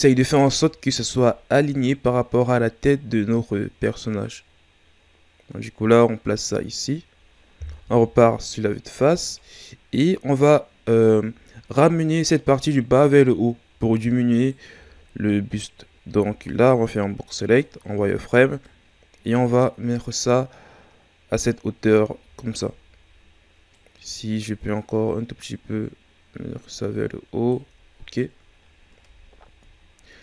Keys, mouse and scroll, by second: 0.1 ctrl+scroll up 2, 0.8-1.3 shift+scroll down 2, 1.3-4.2 ctrl+scroll down 2, 4.2-7.2 drag, 7.9 KP_1, 10.8 right click, 14.3 right click, 14.8 z, 18.6-21.7 drag, 22.2 z, 23.7-26.7 drag, 27.9-28.6 ctrl+scroll up 1, 28.6 shift+scroll up 2, 29.6-30.2 scroll up 4.